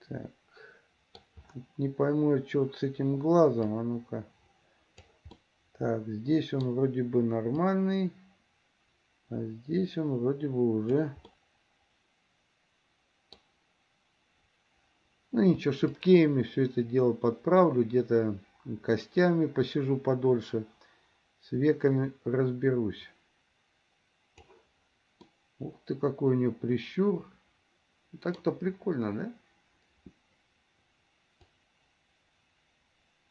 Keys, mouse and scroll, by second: 3.9-5.4 drag, 5.4-6.9 middle drag, 7.9-11.2 drag, 11.5-13.6 middle drag, 16.1-24.7 drag, 25.4-28.6 middle drag, 31.7-33.3 drag.